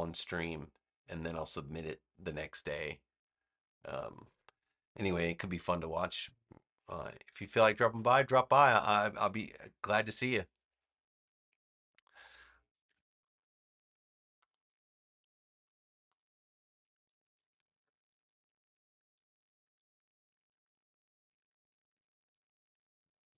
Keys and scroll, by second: 17.0-23.3 typing.